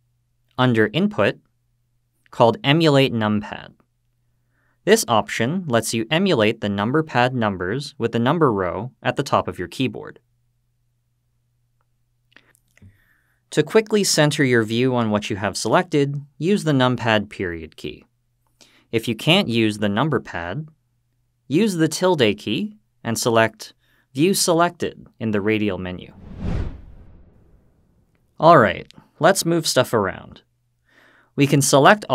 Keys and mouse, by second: 14.5 click, 17.0 KP_Decimal.